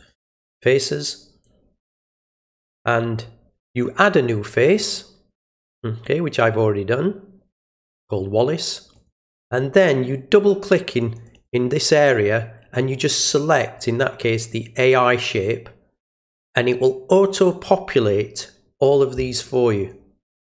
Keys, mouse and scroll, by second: 0.3 click, 1.9 click, 7.6 click, 8.9 click, 10.9 click, 11.2 click, 11.4 click, 13.7 click, 19.5 click.